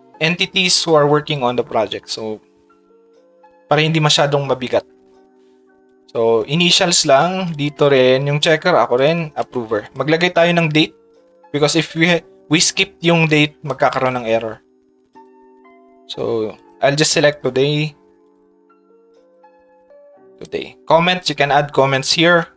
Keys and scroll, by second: 7.2 ctrl+c, 8.4 ctrl+v.